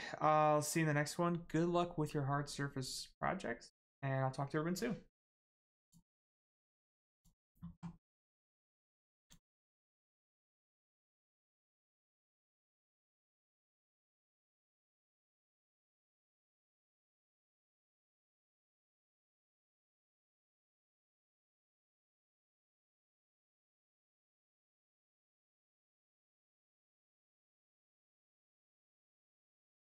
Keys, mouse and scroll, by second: 5.8 click, 9.2 click.